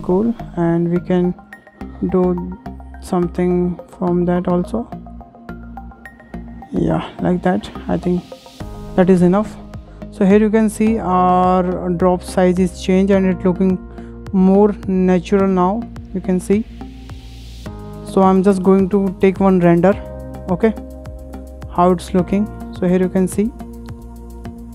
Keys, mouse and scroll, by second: 0.9 click, 1.5 click, 7.5 click, 7.8 scroll down 2, 8.0 middle click, 8.8 Tab, 9.0 Tab, 9.2-9.8 scroll down 5, 9.8 shift+middle click, 10.4-11.2 scroll up 14, 11.4-12.5 middle drag, 12.5 scroll up 5, 13.0-15.4 shift+middle drag, 15.4-16.0 scroll down 8, 16.0-17.4 middle drag, 17.4 scroll down 3, 17.6 middle click, 18.0 scroll down 4, 18.3 shift+middle drag, 18.5 shift+scroll up 1, 18.7-19.1 middle drag, 19.1-19.4 scroll up 4, 19.5 shift+middle drag, 19.7-20.2 scroll down 4, 20.6-21.3 drag, 21.4-21.8 drag, 21.9-22.5 scroll up 7, 22.8-24.7 shift+middle drag.